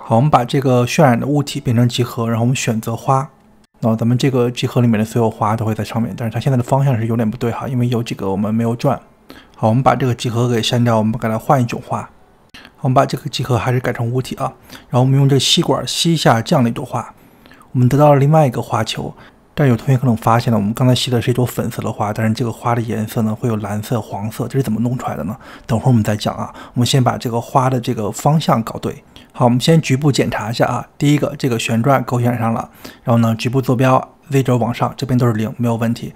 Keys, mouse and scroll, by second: 0.2 middle click, 0.8 click, 2.1-5.5 drag, 5.5 middle click, 6.1 click, 6.8-12.1 middle drag, 12.1 click, 15.5 click, 17.3 click, 18.7-19.6 scroll up 4, 19.7 middle click, 20.2 click, 21.5-26.7 middle drag, 26.7-27.0 scroll down 3, 27.0-32.1 middle drag, 32.1 click, 32.6-36.1 middle drag.